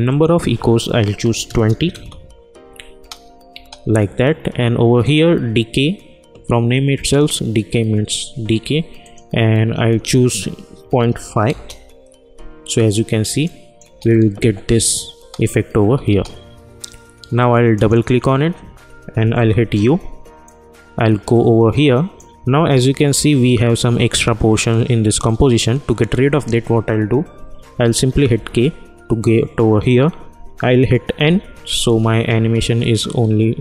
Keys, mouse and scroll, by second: 0.0 click, 1.9 Return, 2.9 space, 5.0 click, 9.0 click, 11.4 Return, 13.4 click, 13.8 space, 17.7 click, 19.4 u, 20.4-24.5 drag, 28.3 k, 31.1 n.